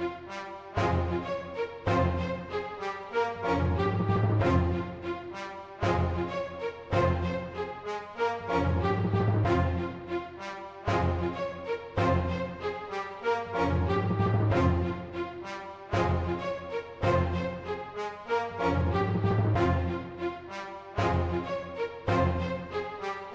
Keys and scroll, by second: 0.0-0.7 typing, 4.6 super+z, 5.9 super+z, 7.4-7.9 typing, 14.4 super+z, 14.5-14.9 typing, 14.9 super+z, 18.3-22.1 typing, 19.1 super+z, 19.7 super+z, 23.1-23.3 typing.